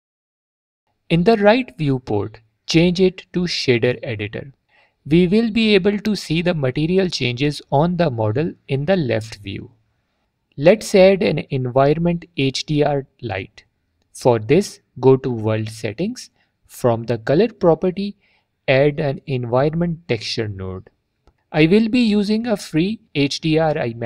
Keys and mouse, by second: 2.1-4.1 drag, 5.9-6.3 middle drag, 15.6 click, 17.3-18.7 drag, 20.7 click.